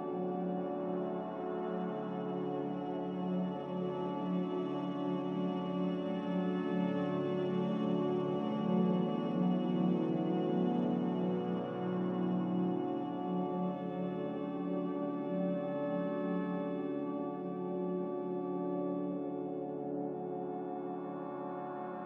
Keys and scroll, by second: 19.6 a.